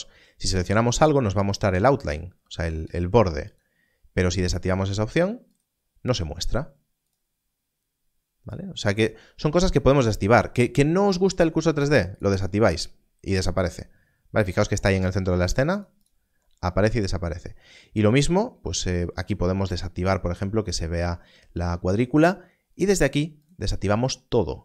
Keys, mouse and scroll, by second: 3.4 click, 13.6 click, 23.4 click.